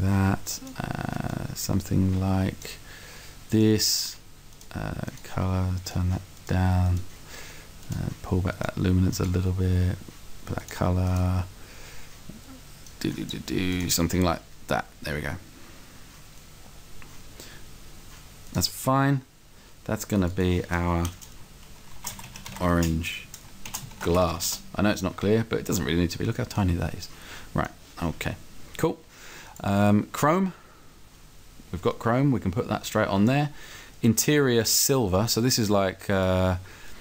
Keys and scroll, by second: 22.0-24.3 typing, 24.6 Return.